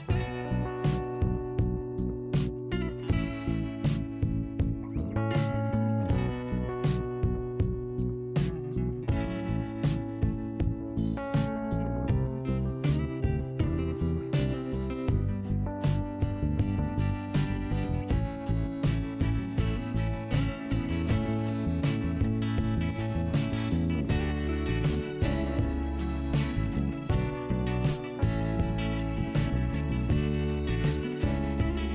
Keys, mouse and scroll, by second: 0.3 scroll down 1, 2.6 click, 3.5 click, 3.6 click, 5.4 click, 6.4 click, 6.5 click, 8.5 click, 8.6 click, 9.3-10.4 scroll down 1, 10.4 click, 10.5 scroll down 1, 10.6 click, 12.0 click, 13.0 click, 14.1 click, 17.1 click, 18.4 click, 21.4 click, 23.0 click, 24.9 click, 25.5-26.6 scroll down 2, 26.6 click, 28.2 click, 29.8 click, 30.7 click, 30.8 click, 31.8 click.